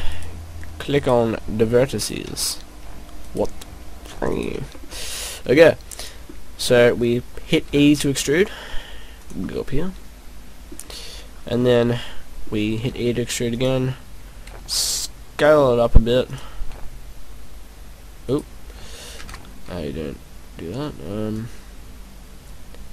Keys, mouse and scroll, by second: 0.1 shift+right click, 0.9 shift+right click, 1.9 shift+right click, 3.1 shift+right click, 4.3 shift+right click, 4.7 middle click, 4.9 middle click, 7.0-7.6 scroll down 4, 8.2 e, 9.3 click, 9.5 middle click, 11.4 scroll down 3, 11.6 middle click, 12.7 e, 13.7 click, 14.4 s, 16.4 click, 16.7 e, 18.5 right click, 19.2 ctrl+z, 21.3 click.